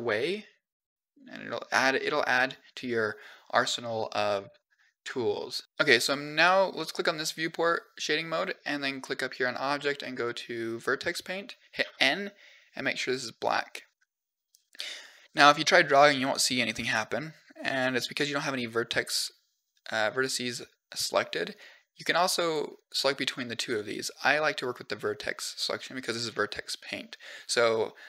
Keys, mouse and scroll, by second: 2.1 click, 4.3 click, 6.2 click, 8.9-10.7 drag, 11.6 n, 12.8 click, 15.1 click, 15.8 click, 16.0 click, 16.2 click, 16.6 click, 21.4 click, 21.9 click, 22.2 click, 22.6 click, 23.1 click, 23.4 click, 23.7 click.